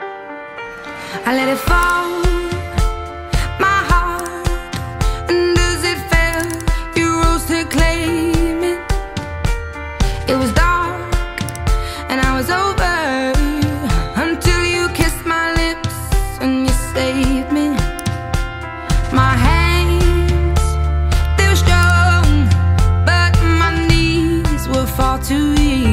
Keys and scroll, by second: 2.9 Return, 5.4 Return.